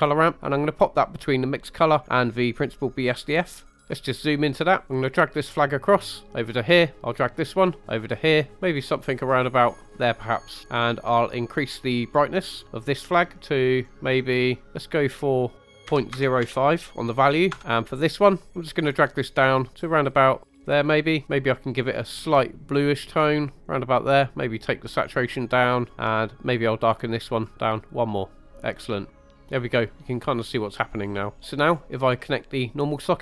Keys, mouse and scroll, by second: 3.0 click, 3.7 scroll up 3, 3.9 middle click, 5.0-6.8 drag, 7.2-9.0 drag, 9.4 click, 11.5 click, 18.4 click, 21.7 click, 26.6 click, 27.3 click, 28.7 scroll down 2, 29.1-30.7 middle drag, 31.1 scroll up 2, 31.7-32.0 scroll up 2, 32.2 middle click.